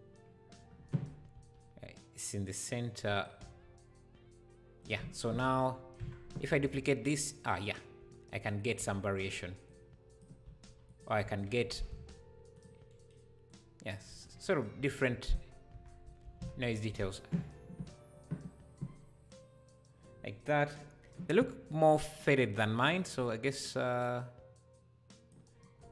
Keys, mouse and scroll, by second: 1.3 g, 5.0 Tab, 5.3 Tab, 5.7 scroll down 2, 6.0 Tab, 6.5 shift+d, 9.7 click, 10.4 s, 11.7 s, 13.5 click, 15.3 Tab, 15.7 Tab, 16.3 shift+d, 16.9 Tab, 20.8 scroll up 3, 22.5 scroll up 1, 23.2-25.8 drag, 23.2 scroll up 3, 25.8-25.9 scroll up 3.